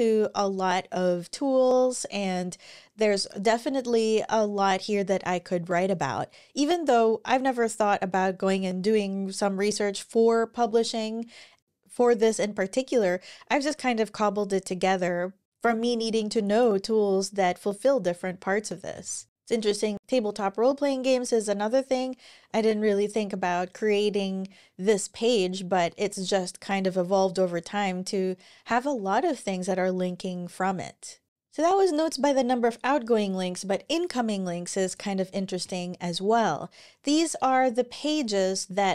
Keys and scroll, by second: 19.2 super+w, 31.2 super+w.